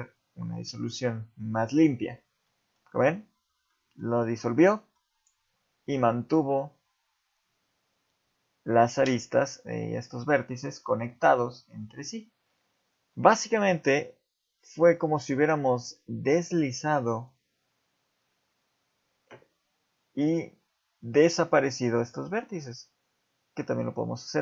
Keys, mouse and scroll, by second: 2.5 middle click, 3.7 middle click, 4.7 middle click, 12.5 ctrl+z, 17.2 click, 21.0 middle click, 22.3 g.